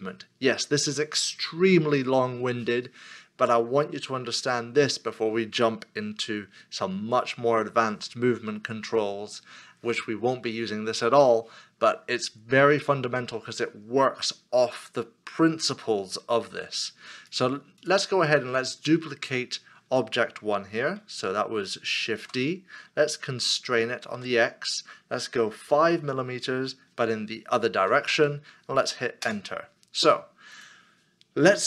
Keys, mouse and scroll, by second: 21.7 middle click, 22.2 shift+d, 24.2 x, 25.6 5, 27.7 -, 29.2 Return.